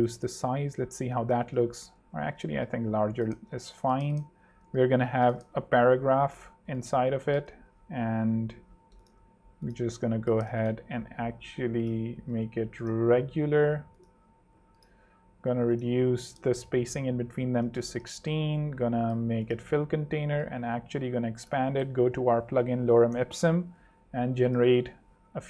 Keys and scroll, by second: 0.5 super+3, 1.2 super+2, 1.6 super+z, 2.2 super+3, 3.4 super+2, 6.8-7.6 typing, 9.8 shift+a, 12.0-13.5 typing, 12.3 Return, 16.4 l, 16.7 6, 16.8 Return, 17.6 super+Return, 21.9 super+p, 22.2-23.1 typing.